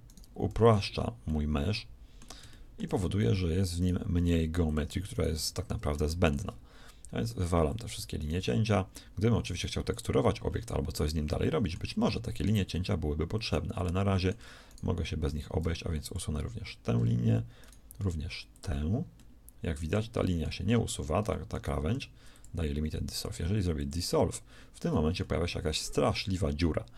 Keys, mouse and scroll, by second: 0.4 x, 4.3 x, 5.3 x, 7.5 x, 8.3 x, 9.8 x, 15.2 x, 21.9 shift+x, 23.0 x.